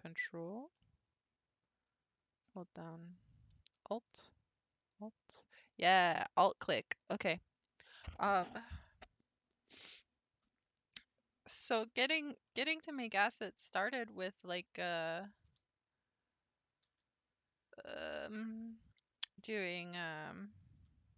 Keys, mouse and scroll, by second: 0.0 ctrl+click, 3.9 alt+click, 4.8 alt+click, 6.5 alt+click, 12.8 shift+middle click, 13.7-14.2 scroll up 1, 14.3-15.5 shift+middle drag, 19.4-20.8 middle drag, 20.8 1.